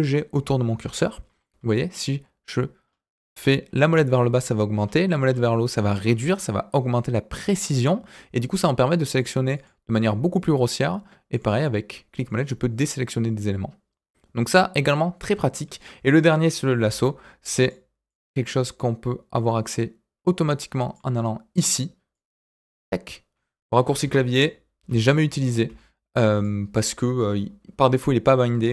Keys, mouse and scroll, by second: 16.8 l, 17.6 click, 18.0-21.0 drag, 22.1 click, 24.0 ctrl+z, 24.8 l, 26.3 click.